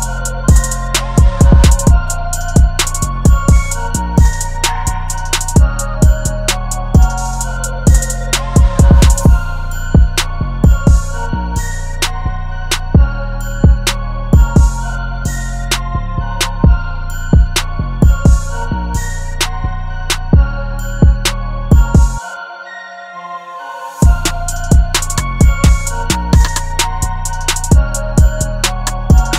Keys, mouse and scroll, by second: 1.5 double click, 6.2 double click.